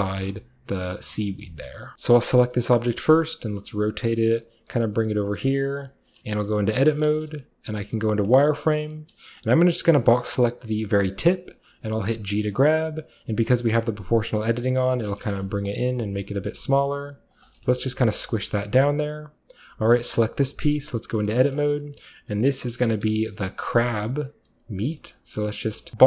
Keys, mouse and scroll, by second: 1.3 shift+middle click, 1.9 Tab, 3.8 click, 3.8-4.5 typing, 4.2 drag, 5.4 click, 5.7-6.3 typing, 5.8 click, 6.1 click, 7.3-9.7 middle drag, 7.8 z, 8.3 z, 9.7 click, 10.8-11.8 scroll up 1, 11.8-13.1 scroll up 1, 11.8 g, 13.1-14.2 scroll down 4, 14.9 click, 15.1-16.3 typing, 15.4 click, 16.3-17.6 scroll up 1, 17.4 click, 17.6 scroll down 1, 18.0-18.8 typing, 18.6-20.6 shift+middle drag, 20.3-26.0 typing, 21.6 click, 22.5 click, 23.1 click, 23.7 click, 24.0 click, 24.9 click, 25.9 click.